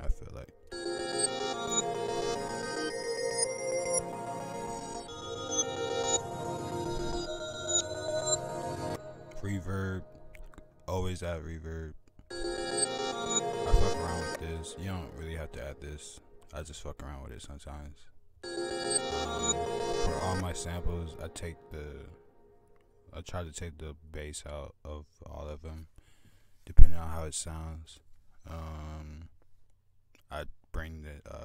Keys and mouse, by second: 6.9 right click, 7.7-8.8 drag, 9.0 drag, 10.9 click, 11.2 click, 11.7-12.3 drag, 11.8 !, 13.6 drag, 14.6-16.2 typing, 16.0 drag, 16.4-17.1 drag, 17.5-17.9 drag, 18.0-18.5 drag, 19.4 click, 27.8 click, 29.5 click.